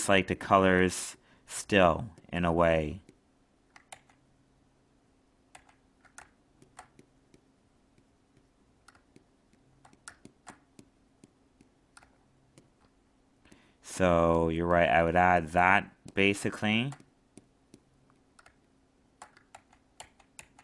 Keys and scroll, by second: 3.9 ctrl+z, 19.5 ctrl+z.